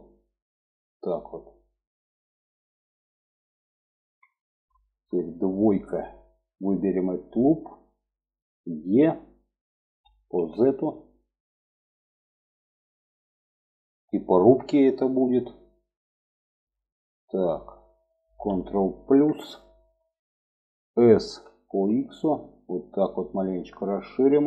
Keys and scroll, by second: 8.9 e, 19.2 ctrl+KP_Add, 21.2 s.